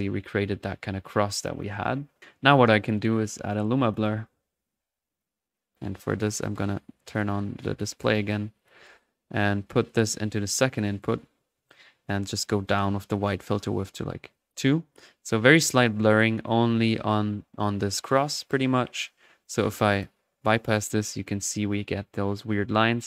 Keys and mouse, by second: 0.8 middle click, 1.4-1.9 drag, 2.2 middle drag, 3.4-3.8 right drag, 3.8-5.6 drag, 4.9-6.0 typing, 7.1 click, 7.6 click, 8.5 click, 9.8-11.2 drag, 12.0 click, 13.1 click, 13.6 middle click, 14.3 click, 14.8-15.3 middle drag, 15.3-17.0 drag, 17.0-18.4 middle drag, 19.4 click, 20.8 click, 21.3-23.0 drag.